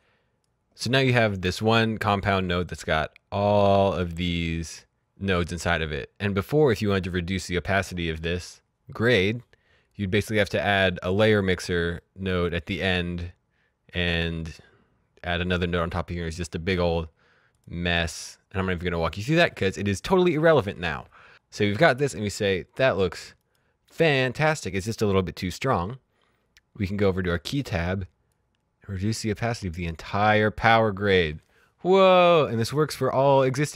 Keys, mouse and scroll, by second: 3.2 right click, 4.5 click, 11.8 scroll up 1, 11.9 middle click, 17.4 right click, 18.1 click, 21.1 click, 23.3 click, 25.3 click, 27.1 click.